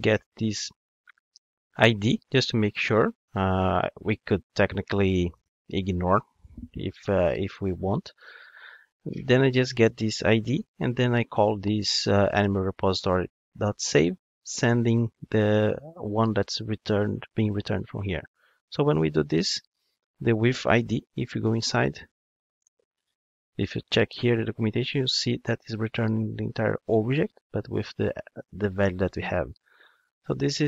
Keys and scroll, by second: 21.0 super+b, 22.6 ctrl+Tab, 30.3 super+b.